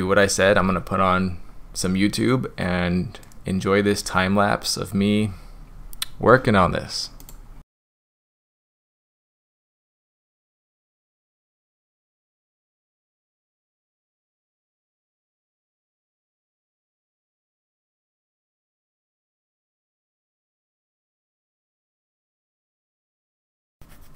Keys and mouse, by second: 7.6 click, 7.6-23.6 typing, 7.8 click, 7.9 click, 8.0 click, 8.3 middle click, 8.4 middle click, 8.7 click, 8.8 drag, 9.0 click, 9.3 middle click, 9.4 click, 9.7 click, 9.8 click, 10.0 click, 10.2 click, 10.3 drag, 10.5 click, 10.6 click, 10.8 click, 10.9 click, 11.2 middle click, 11.5 click, 11.7 middle click, 12.1 click, 12.2 middle drag, 12.3 drag, 12.6 middle click, 12.9 click, 13.0 click, 13.5 click, 13.7 click, 13.8 click, 14.0 click, 14.3 click, 14.5 click, 14.6 click, 14.9 click, 15.1 click, 15.3 click, 15.5 middle click, 15.8 click, 16.1 click, 16.6 click, 16.8 click, 16.9 middle click, 17.2 click, 17.4 click, 17.6 click, 17.7 click, 17.9 click, 18.0 click, 18.1 middle click, 18.3 click, 18.4 click, 18.6 click, 18.7 click, 18.8 click, 19.1 click, 19.4 click, 19.6 middle click, 19.8 click, 20.1 click, 20.2 middle click, 20.3 middle click, 20.5 middle click, 20.6 click, 20.7 click, 20.9 click, 21.0 click, 21.4 drag, 21.6 click, 21.7 click, 22.0 click, 22.2 click, 22.3 click, 22.5 click, 22.6 click, 22.7 click, 22.9 click, 23.0 middle click, 23.1 click, 23.2 middle click, 23.4 click, 23.7 click.